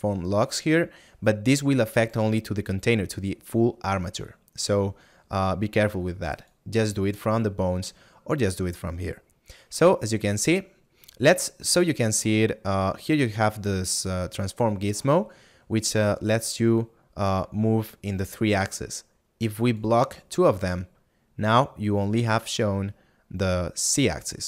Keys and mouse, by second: 19.8 click.